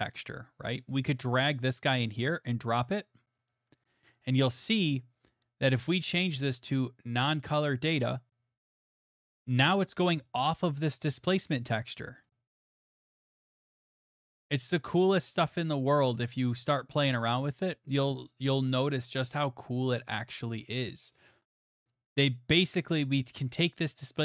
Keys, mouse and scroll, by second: 0.7 click, 6.3 click, 7.5 click, 9.2 middle click, 11.0 middle click, 11.1 click, 13.1 click, 15.8 click, 16.1 right click, 16.7 click, 18.1 right click, 19.3 right click, 21.1 right click, 21.9 middle click, 23.5 click.